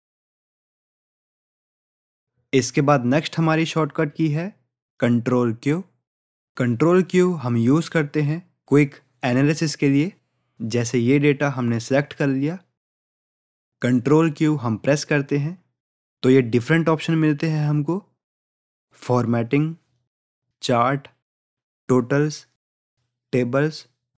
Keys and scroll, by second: 14.5 ctrl+q.